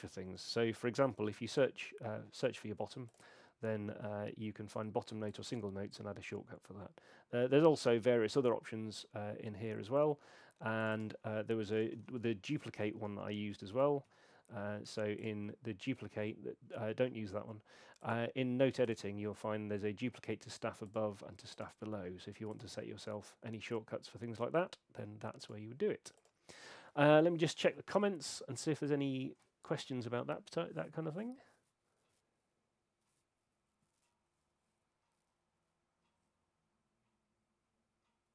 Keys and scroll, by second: 0.7-1.9 typing, 11.5-14.1 typing.